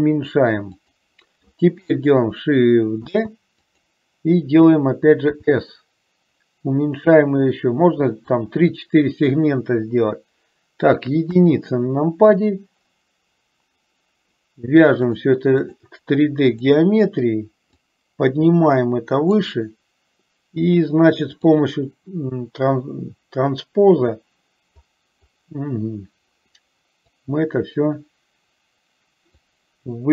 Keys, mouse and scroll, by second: 3.1 shift+d, 5.4 s, 11.3 KP_1, 15.2-16.8 drag, 18.1-19.6 drag, 21.5 click, 27.4-29.5 drag.